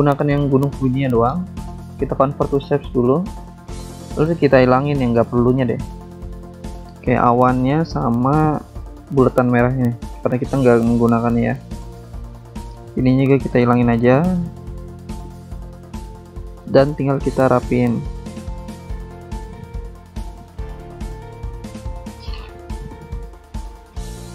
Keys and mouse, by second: 3.9 click, 5.9 click, 6.7 ctrl+click, 7.4 click, 7.9 ctrl+click, 8.4 click, 9.2 ctrl+click, 9.7 BackSpace, 10.2 click, 10.8 click, 11.7 ctrl+click, 12.8 BackSpace, 13.2 click, 14.0 click, 15.1 BackSpace, 15.6 click, 16.5 click, 17.7 BackSpace, 18.1 click, 18.9 click, 21.1 click, 23.2 click.